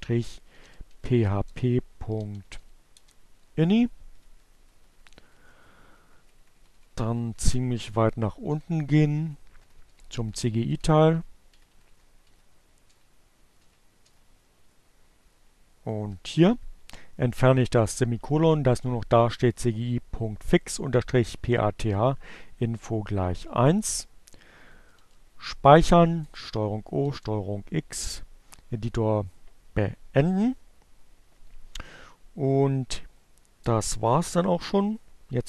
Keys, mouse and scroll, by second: 0.0-1.7 typing, 2.8 Page_Down, 12.4 Page_Down, 13.7 Down, 22.8 ctrl+o, 25.1 Return, 25.5 ctrl+x, 35.2 Up.